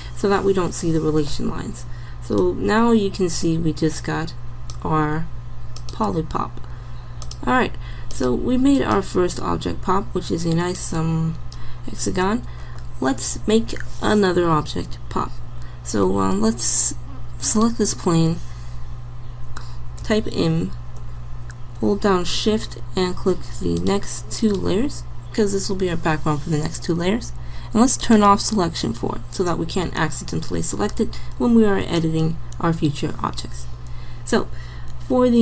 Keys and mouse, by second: 20.1 m, 28.1 click, 29.6 click.